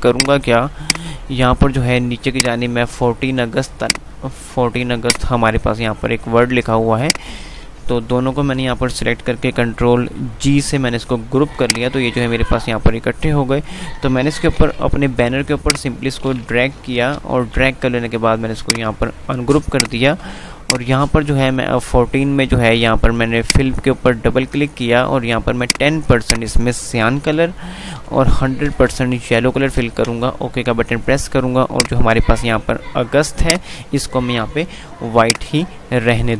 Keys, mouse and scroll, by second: 0.3 click, 0.4 F2, 0.9 click, 1.4 F2, 2.1 click, 2.4 F2, 3.9-7.1 drag, 8.0 e, 10.6 ctrl+g, 11.8-14.6 drag, 14.6 shift+Page_Up, 15.1 F2, 15.8 click, 16.3 F2, 17.0 Page_Up, 18.8 click, 23.5 click, 28.0 Tab, 31.9 click, 35.9 F2.